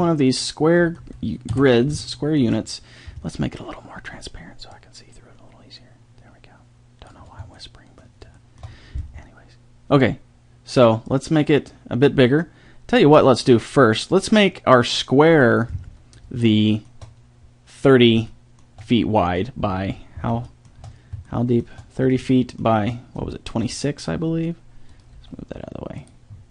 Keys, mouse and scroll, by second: 1.5 KP_7, 7.6 middle click, 16.5-19.4 middle drag, 19.5 middle click, 21.0 middle click, 24.0 middle drag, 25.2 g.